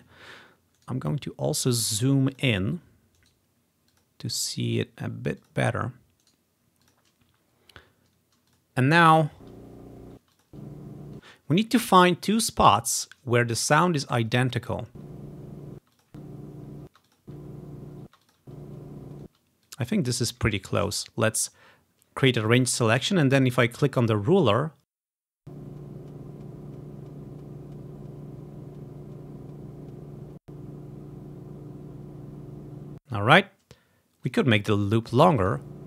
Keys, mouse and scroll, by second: 0.9 right click, 2.4 click, 3.3 right click, 3.3 click, 4.0 click, 4.8 click, 5.5 click, 6.4 right click, 7.0 click, 7.6-9.2 scroll down 3, 8.6 click, 9.2 click, 9.5 space, 10.3 space, 10.4 click, 10.6 space, 10.9-12.1 drag, 11.3 space, 13.7-15.5 drag, 15.0-19.4 typing, 16.0-17.2 drag, 17.3-18.4 drag, 18.4 click, 19.8-21.0 drag, 25.5 click, 27.1 scroll up 1, 30.4-32.1 drag, 32.4-34.6 ctrl+scroll down 1, 33.1 space, 35.5-35.8 drag.